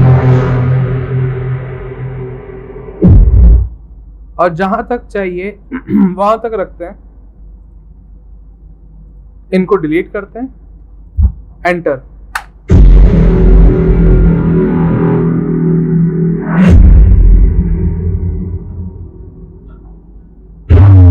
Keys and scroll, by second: 6.0 v, 7.3 c, 9.2-10.0 typing, 12.4 Return.